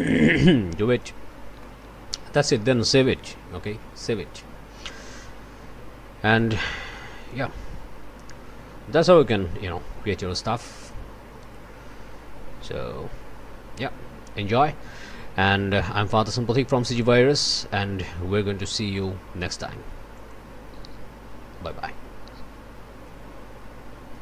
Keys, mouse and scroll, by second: 1.0 middle click, 1.6 click, 2.3 middle click, 3.5 ctrl+s, 7.2 click, 20.1 click, 24.1 click.